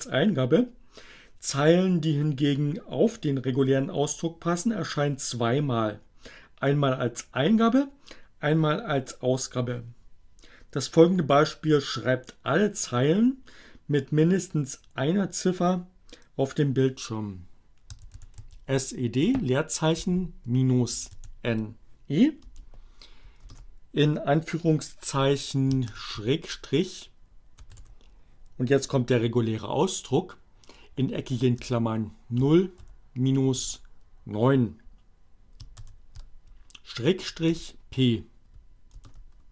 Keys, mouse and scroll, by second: 17.2-18.3 typing, 19.4-20.6 typing, 22.3 space, 25.0 shift+7, 27.5 alt+8, 30.1 0, 32.3-33.1 typing, 33.7 alt+9, 35.2 shift+7, 37.6 p, 38.8 Return.